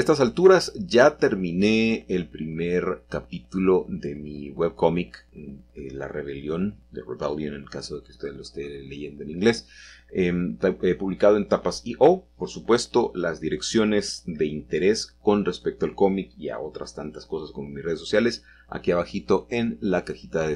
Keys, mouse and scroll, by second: 1.8-3.1 shift+drag, 3.1 z, 5.8 click, 10.7 click, 11.6 middle click, 11.8 middle click, 11.9 middle click, 14.4 middle click, 15.1-16.2 drag, 16.7 g, 17.2 x.